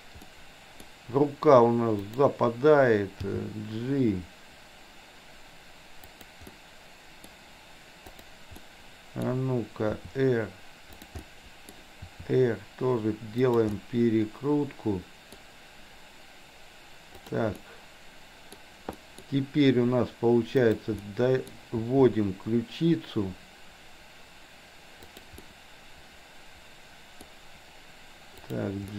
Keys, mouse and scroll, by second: 0.3-0.8 middle drag, 0.8-2.0 scroll down 1, 2.0 click, 3.2 g, 6.6-7.3 middle drag, 8.6-9.2 middle drag, 10.0 r, 11.2-12.2 middle drag, 12.2 r, 13.8-15.3 middle drag, 17.3 click, 17.6-18.6 middle drag, 19.0 middle drag, 20.6-21.0 drag, 21.1-21.5 middle drag, 21.8 r, 25.5-27.3 middle drag, 28.3 click, 28.8-28.9 middle drag.